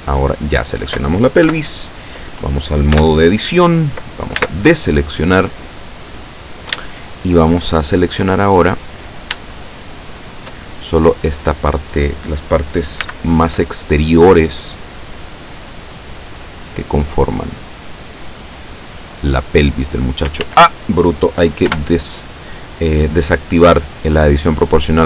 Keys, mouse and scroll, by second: 1.5 KP_7, 3.1 Tab, 4.4 a, 6.9-8.3 shift+drag, 8.8-9.8 scroll up 6, 13.1 b, 13.5-17.4 drag, 18.7-20.4 drag, 20.4 ctrl+z, 21.7 o.